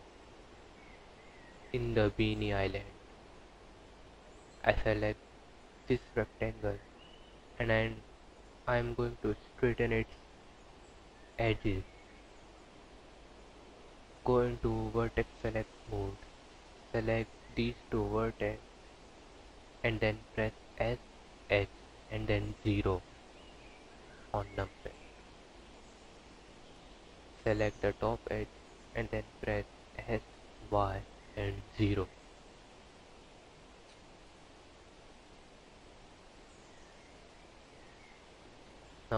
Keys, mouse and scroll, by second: 4.6-4.9 scroll up 6, 13.0 click, 14.3 1, 17.0 click, 19.2 s, 22.3 click, 24.1 s, 26.8 click, 29.5 s, 32.5 click, 34.4 s, 36.3 3, 36.9 click, 38.5 scroll down 6.